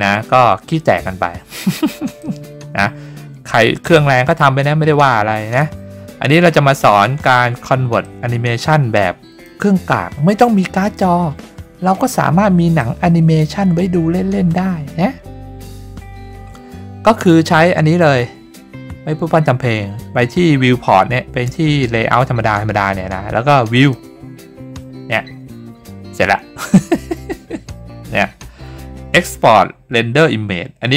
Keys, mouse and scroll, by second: 2.2-5.6 drag, 8.0-9.4 drag, 12.8-17.2 drag, 23.7 click.